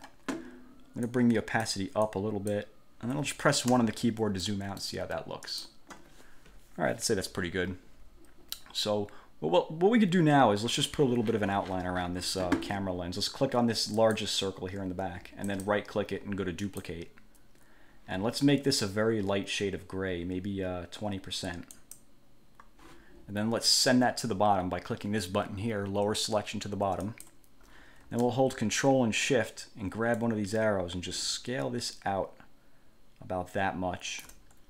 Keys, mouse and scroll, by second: 1.3 click, 2.2 click, 3.9 1, 4.6 click, 5.7 click, 14.1 click, 15.7 click, 16.8 click, 21.9 click, 27.2 click, 30.3-34.5 ctrl+shift+drag.